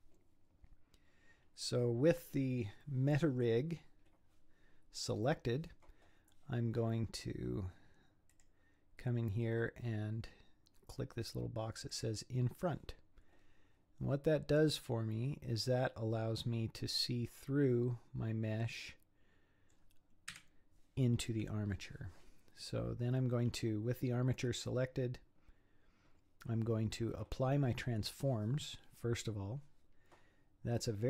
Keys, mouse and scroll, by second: 8.3 click, 11.9 click, 16.8-19.8 middle drag, 20.3 KP_1.